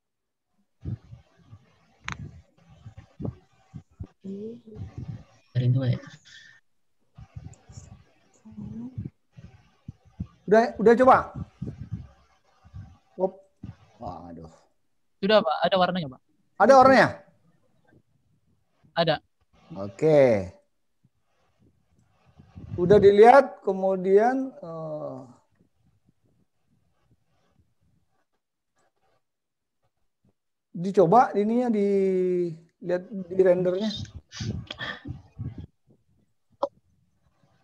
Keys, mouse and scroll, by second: 4.7 click, 7.6 click, 11.2 click, 14.5 click, 16.3 click, 19.9 click, 24.2 click, 36.1 click.